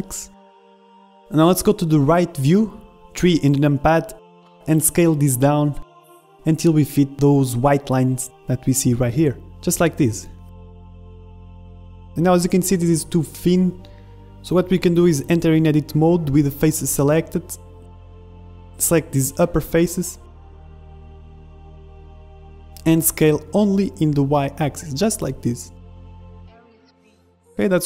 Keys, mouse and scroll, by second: 0.0-0.9 typing, 1.6-4.6 middle drag, 4.6 s, 7.6-11.7 middle drag, 10.0 s, 12.1-15.2 middle drag, 13.0 z, 15.1 z, 15.4 middle click, 15.6 Tab, 16.3-18.4 drag, 16.6 ctrl+Tab, 18.5 middle click, 18.9 a, 19.1 middle click, 19.6 KP_1, 19.9 b, 20.7 b, 21.4 middle click, 21.9 click, 21.9-23.4 middle drag, 22.6 KP_1, 22.6 KP_3, 23.7 s, 26.3-27.8 middle drag, 26.6 z, 27.3 z.